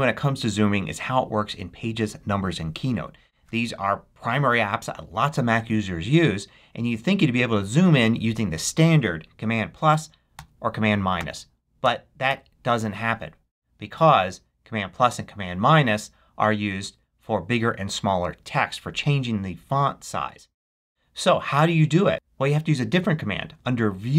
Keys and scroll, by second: 10.3 super+=, 11.1 super+-, 11.7 super+=, 12.2 super+-.